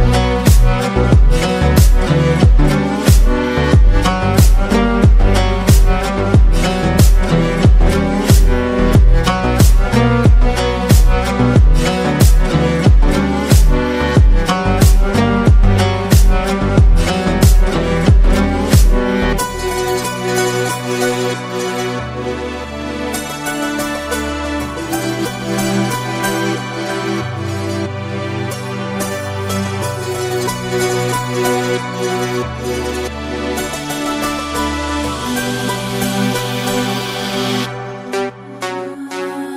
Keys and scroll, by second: 10.3 ctrl+-, 10.5 ctrl+-, 13.7 ctrl+i, 14.9-15.7 typing, 17.6 typing, 18.9 typing, 22.6 ctrl+z, 22.7 ctrl+z, 22.9 ctrl+z, 23.1 ctrl+z, 23.3 ctrl+z, 23.5 ctrl+z, 26.6-27.4 typing, 37.8 ctrl+-, 38.0 ctrl+-.